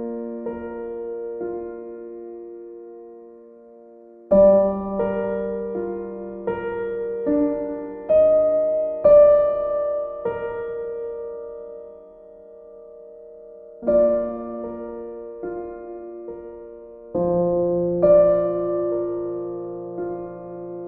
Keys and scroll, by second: 3.6 b.